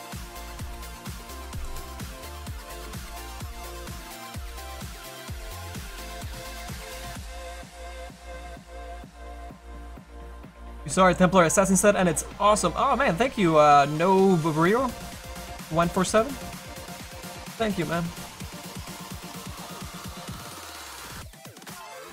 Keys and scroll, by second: 1.4 space.